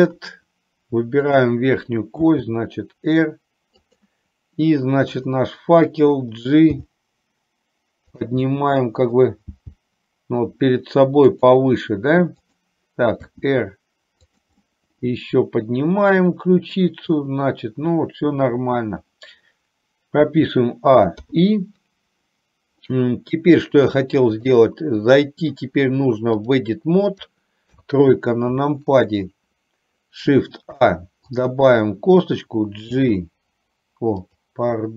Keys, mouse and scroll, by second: 1.4 click, 2.4 r, 5.4 click, 7.0 g, 8.6 middle click, 9.9 g, 12.5 click, 13.5 r, 14.7-16.9 middle drag, 20.5 a, 21.5 i, 24.0 click, 25.1 middle click, 26.6-27.7 drag, 27.9 KP_3, 31.0 shift+a, 31.4 click, 33.0 g, 34.5 click.